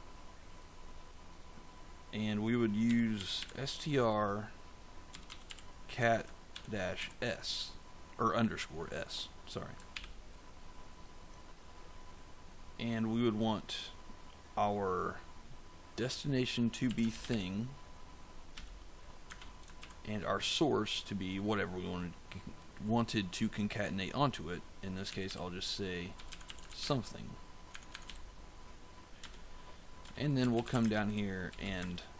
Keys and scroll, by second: 2.5-6.9 typing, 9.8 shift+9, 16.5-19.7 typing, 24.7-28.0 typing, 27.6 Tab, 29.1 Return, 30.1-32.1 typing.